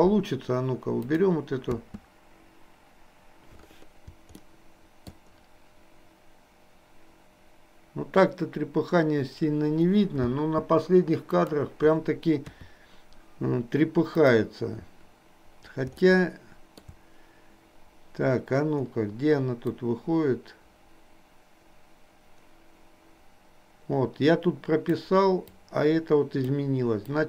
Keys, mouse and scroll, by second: 1.0 click, 1.9 space, 4.5 shift+middle click, 10.3 space, 11.4 click, 12.5 KP_3, 14.3 click, 16.2 shift+middle click, 19.8-25.2 drag, 25.7-26.7 drag.